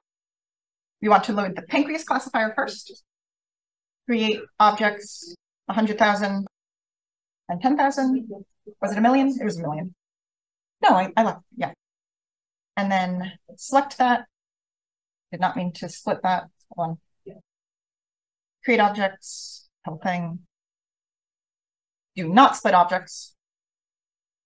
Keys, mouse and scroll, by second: 0.7 click, 4.6 click, 5.1 click, 6.2-8.3 typing, 10.4 click, 13.4 click, 13.6-14.8 drag, 14.9 drag, 16.7 click, 18.3 Return, 18.3 click, 19.4 click, 19.7 click, 21.3 click, 22.3 click, 22.9 click, 23.4 click.